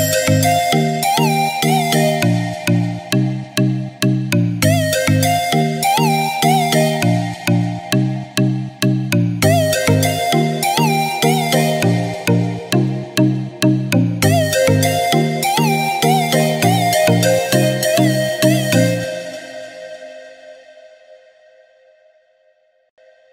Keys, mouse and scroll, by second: 1.1 space, 2.0 scroll down 1, 2.1 click, 2.5-3.3 scroll up 1, 3.3 click, 3.9 scroll up 1, 5.7-7.8 ctrl+drag, 7.8-9.2 ctrl+right drag, 9.2 scroll up 1, 10.0-12.3 drag, 13.0-13.4 scroll up 1, 13.4-16.0 drag, 16.0-17.5 drag, 20.6 scroll down 2, 21.9 click, 22.3 scroll down 1.